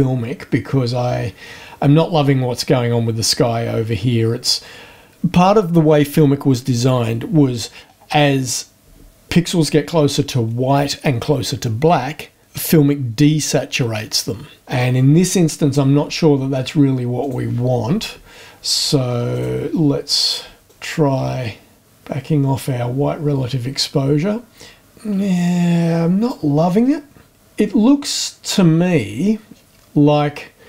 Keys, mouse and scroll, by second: 17.2 click, 19.3 click, 20.7-26.5 drag, 29.5-30.3 scroll up 4.